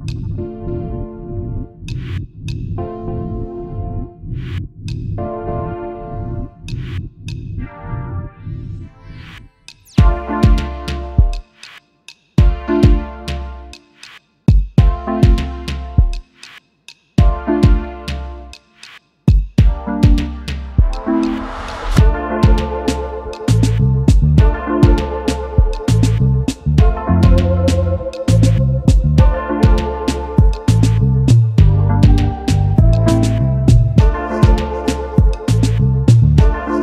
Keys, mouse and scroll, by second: 0.1 shift+click, 3.2 shift+click, 4.1 shift+click, 7.6 double click, 7.8 space, 7.9 double click, 8.2 space, 8.9 space, 9.0 double click, 9.4 space, 12.1 right click, 15.7 double click, 15.9 space, 16.0 double click, 16.8 right click, 18.8 double click, 24.2 double click, 24.8 alt+scroll up 1, 27.0 alt+scroll down 1, 27.8 alt+scroll down 1, 28.7 alt+scroll down 1, 30.3 double click, 30.6-31.9 scroll down 1, 31.9 right click, 32.8 double click, 33.3 right click, 35.8 double click.